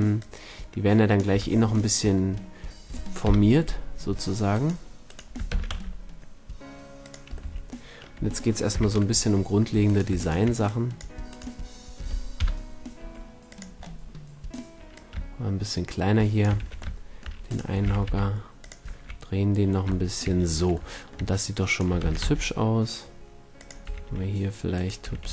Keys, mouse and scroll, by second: 0.2-1.3 drag, 1.3 a, 3.2 KP_7, 5.5 shift+d, 7.1-9.4 drag, 7.4 a, 8.7 z, 10.6-11.2 drag, 10.6-11.2 middle drag, 10.6-11.2 right drag, 12.4 KP_1, 13.0 s, 15.6-16.6 drag, 16.6 a, 17.8 r, 18.7 drag, 19.0 a, 20.3 drag, 22.0 shift+d, 23.7-25.3 drag, 23.8 r, 24.8 right click, 25.0 r.